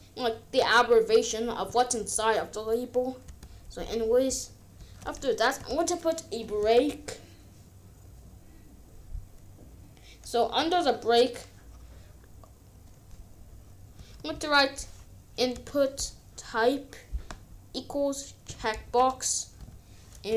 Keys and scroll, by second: 3.2 Return, 4.7 b, 5.0 r, 5.5 Return, 13.6-14.6 typing, 15.5 Return, 18.8 BackSpace, 20.2 space.